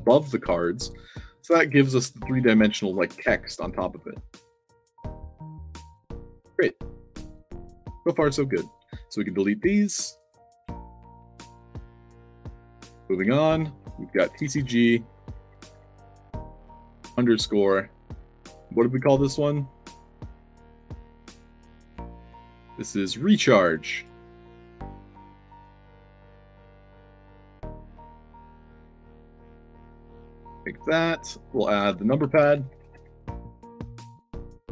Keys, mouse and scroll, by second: 0.0 d, 0.3 a, 1.5 d, 3.0 d, 3.7 a, 5.3 d, 6.2 d, 8.5 click, 10.1 click, 11.4 click, 12.1 click, 12.4 Caps_Lock, 12.7 f, 13.4 click, 14.2 shift+c, 16.3 c, 20.7 click, 21.1 click, 23.5 click, 23.9 click, 24.5 middle click, 25.0 click, 25.9-29.5 typing, 27.3 Caps_Lock, 29.7 ctrl+c, 30.1 click, 30.7 click, 31.4 click, 31.7 ctrl+v, 32.3 space, 32.6 shift+p, 33.7 click, 34.3 click.